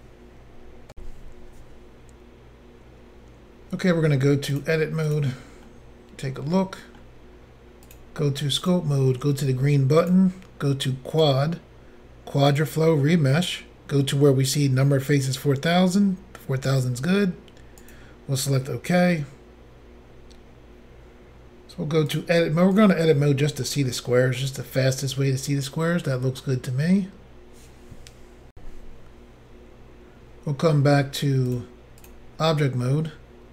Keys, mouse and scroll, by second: 0.9 Insert, 4.5 click, 4.6 click, 5.1 click, 5.1 click, 5.6 middle click, 7.9 click, 7.9 click, 8.6 click, 8.7 click, 10.0 click, 10.1 click, 11.1 click, 11.2 click, 12.5 click, 12.7 click, 17.9 click, 17.9 click, 22.1 click, 22.2 click, 22.8 click, 22.8 click, 23.3 middle click, 24.4 middle click, 28.5 Insert, 31.5 click, 31.6 click, 32.0 click, 32.1 click.